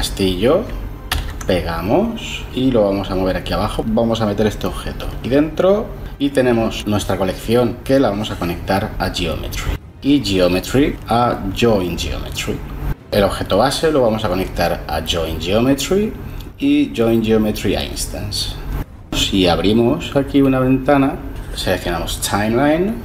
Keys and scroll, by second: 1.1 ctrl+v.